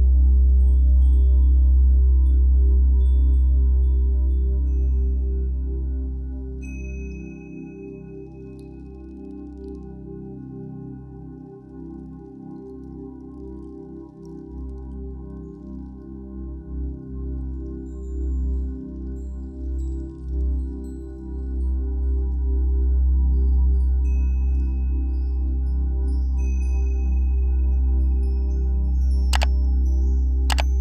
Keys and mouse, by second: 5.1 ctrl+=, 5.6 =, 6.2 click, 7.9 click, 10.0 click, 12.7-15.4 typing, 12.9 click, 13.4 ctrl+=, 14.1 click, 15.0 click, 15.3 click, 15.8 click, 16.6 -, 17.0 space, 17.2 click, 17.3 space, 18.4 click, 20.1 ctrl+KP_0, 20.1 ctrl+Insert, 21.0 ctrl+0, 23.0 click, 27.9 click.